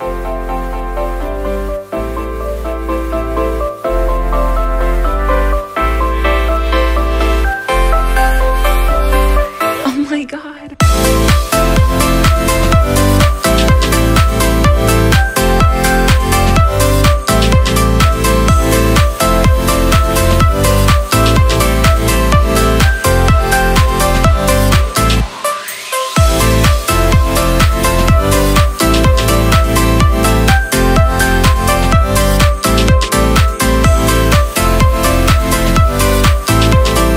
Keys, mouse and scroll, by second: 15.2 shift+click, 17.2 alt+middle click, 19.5 shift+click, 21.1 shift+click, 28.2 shift+click, 28.9 shift+click, 29.6 shift+click, 30.2 shift+click, 31.1 shift+click, 31.7 shift+click, 32.4 shift+click, 33.0 shift+click, 33.6 shift+click, 34.3 shift+click, 35.2 shift+click, 36.2 ctrl+x.